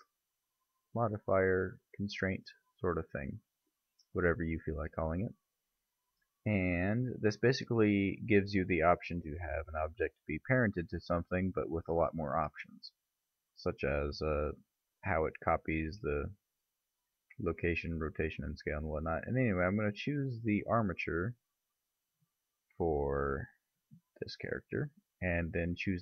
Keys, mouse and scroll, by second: 0.0 click, 19.3 click.